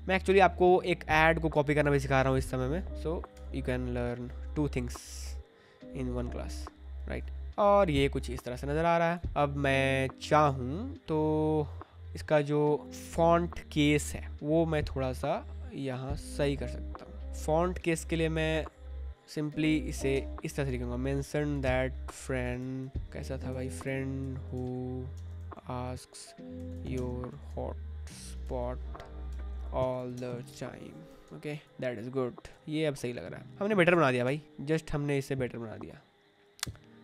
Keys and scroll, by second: 3.3 Escape, 18.3-31.0 typing, 31.2 Escape, 32.4 ctrl+t, 34.2 Return.